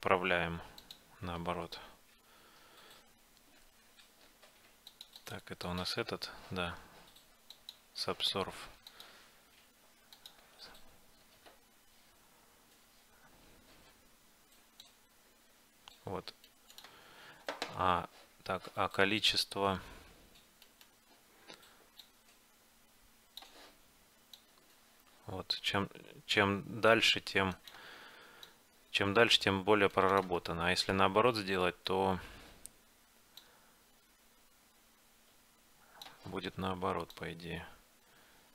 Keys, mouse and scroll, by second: 5.3-7.6 drag, 8.3-11.6 drag, 14.9-16.6 drag, 17.1-19.6 middle drag, 20.7-22.6 right drag, 22.1-24.0 drag, 24.4-26.2 drag, 28.6-30.3 drag, 30.6-33.5 middle drag, 33.5-35.6 drag, 37.3-38.5 drag.